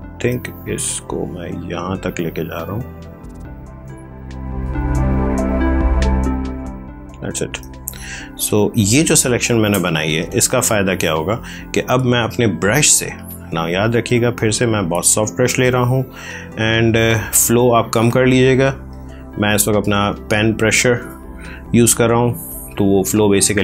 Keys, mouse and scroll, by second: 0.3 click, 0.7 space, 1.4 click, 7.5 space, 7.8 ctrl+click, 13.8 right click, 14.8 click, 21.5 click, 22.6-23.6 typing.